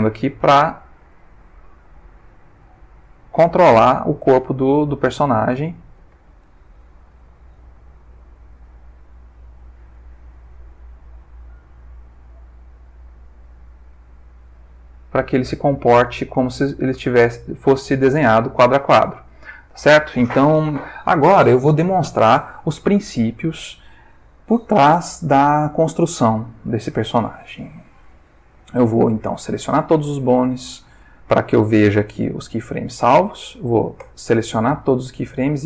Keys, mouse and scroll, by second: 4.3 click, 5.2 r, 6.1 Escape, 6.8 g, 8.6 click, 9.9 i, 12.1 click, 13.1-18.2 drag, 18.5 ctrl+middle click, 19.3 ctrl+shift+middle click, 29.3 a, 31.7 middle click, 34.0 a, 35.1 x.